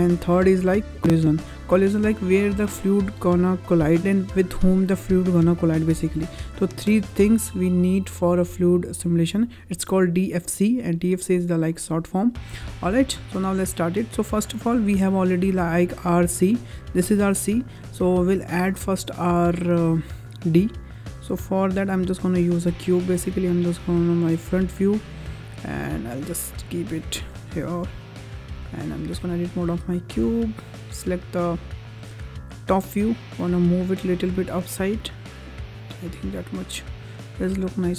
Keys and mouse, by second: 0.8 click, 6.7 click, 7.4 click, 8.1 click, 8.7 click, 11.0 click, 11.6 click, 12.8-14.5 ctrl+drag, 15.9 click, 16.8 click, 18.5 click, 19.5 shift+a, 23.1 drag, 25.7 click, 28.6 middle drag, 29.0 Tab, 29.4 middle click, 31.4 3, 32.8 middle click, 33.3 g, 34.2 z, 34.9 click, 35.1 `, 36.0 Tab, 37.5 click.